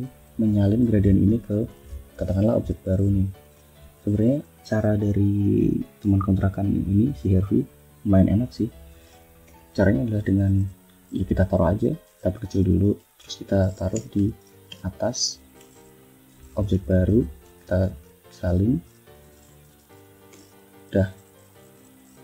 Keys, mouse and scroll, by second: 0.5 click, 1.9 F1, 2.2 click, 2.6 click, 3.4 click, 4.1 click, 4.5 click, 9.3 Home, 11.1 ctrl+shift+click, 12.6 ctrl+shift+click, 13.8 ctrl+shift+Up, 14.5 ctrl+shift+Down, 15.9 shift+click, 16.3 shift+scroll down 2, 16.7 ctrl+shift+click, 17.3 ctrl+c, 18.5 ctrl+shift+click, 20.2 ctrl+shift+v, 20.9 ctrl+shift+click, 21.3 ctrl+click, 21.7 ctrl+click.